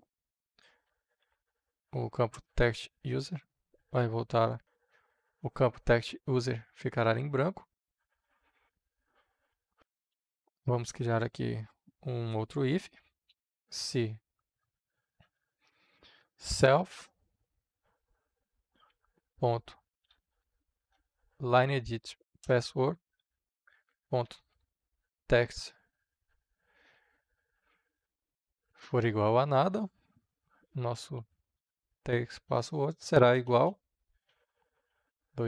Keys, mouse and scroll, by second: 0.6-1.7 typing, 2.2 Return, 2.8 space, 3.2 +, 3.3 space, 4.0 shift+`, 4.6 Right, 9.4 Return, 10.5 Return, 11.8-13.9 typing, 15.2-17.0 typing, 19.1-20.9 typing, 21.7 Down, 22.3 Return, 23.6-25.7 typing, 26.7 Right, 28.0 Return, 30.6-34.8 typing, 32.1 Down, 32.4 Return.